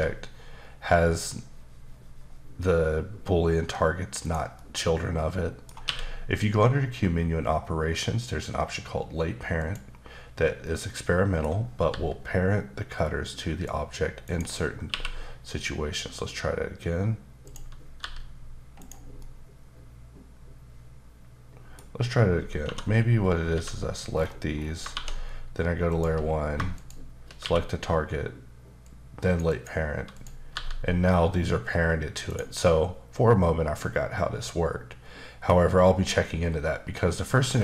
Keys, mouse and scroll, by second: 4.2 right click, 4.5 middle click, 5.8 q, 9.6 click, 10.7 middle click, 11.9 g, 14.2 right click, 14.9 q, 17.4 click, 18.0 g, 18.8 right click, 19.2 middle click, 22.6-23.5 typing, 24.1-24.6 scroll down 2, 24.6 scroll up 2, 24.9 shift+1, 25.9 shift+click, 26.8 shift+click, 27.4 q, 28.8 click, 29.5 double click, 30.1 click, 30.5 g, 32.3 right click, 32.6 middle click, 35.5 scroll up 2, 36.6-37.0 scroll down 1.